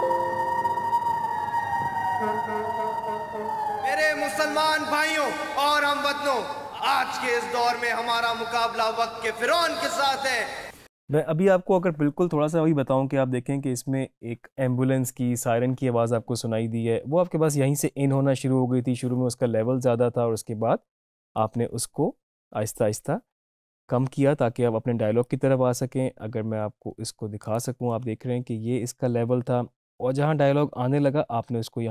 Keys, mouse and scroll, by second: 10.5 space, 21.4 click, 25.3-28.0 drag.